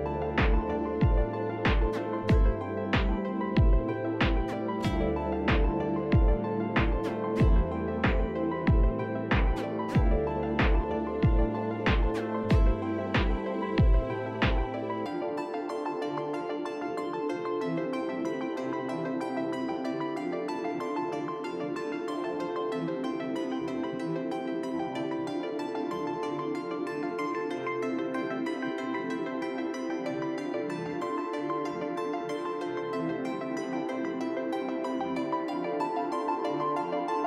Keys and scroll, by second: 0.9 1, 2.5 b, 4.3 b, 5.9 ctrl+z, 6.1 ctrl+z, 6.3 ctrl+z, 6.7 b, 7.7 b, 11.4 ctrl+z, 11.4 ctrl+z, 12.1 F4, 13.3 f, 15.6 p, 24.2 s, 25.4 F4, 27.3 F4, 28.9 F4, 29.4 F4, 31.0 F4, 33.2 F4, 33.8 f.